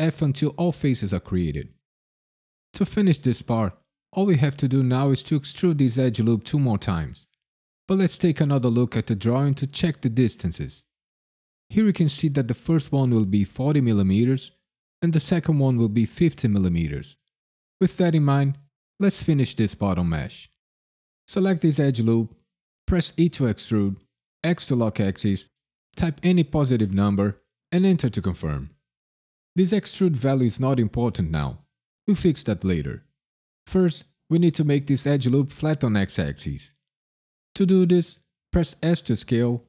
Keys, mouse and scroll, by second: 0.0-1.3 typing, 20.5 click, 23.1 e, 24.4 x, 26.2 KP_1, 27.0 KP_0, 27.7 KP_Enter, 38.8 s.